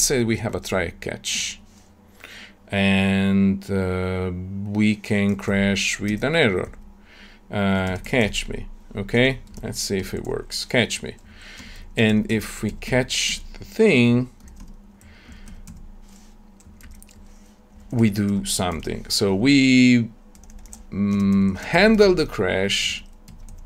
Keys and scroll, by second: 1.3 Tab, 6.0 Tab, 13.2 Tab, 18.6 ctrl+alt+l.